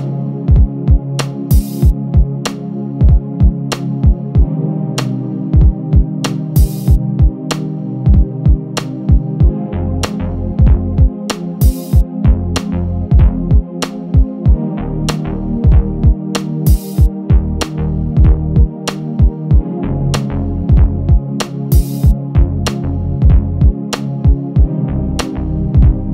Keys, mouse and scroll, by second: 0.6 shift+d, 3.0 x, 3.4 Escape, 3.6 z, 4.2 click, 4.8 g, 5.5 KP_1, 5.9 shift+d, 7.2 click, 8.5-8.8 scroll up 2, 8.8 click, 9.7-10.3 scroll up 2, 10.3 click, 10.6 KP_1, 10.8-11.3 scroll down 2, 11.4 g, 12.8 click, 13.8 click, 15.5 KP_1, 16.6 scroll down 1, 16.9 Tab, 17.4 click, 18.2 KP_1, 18.4-19.0 scroll down 1, 19.3 click, 20.3 click, 22.2 click, 24.5 z, 25.0 click, 25.8 click.